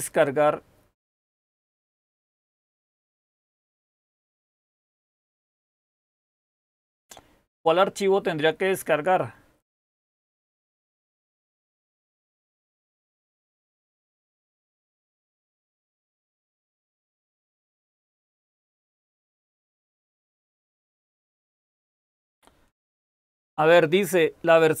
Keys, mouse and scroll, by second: 6.9-7.6 scroll down 1, 7.6-9.7 scroll down 1, 9.7-17.2 scroll down 1, 17.2-19.7 scroll down 1, 19.7-24.8 scroll down 1.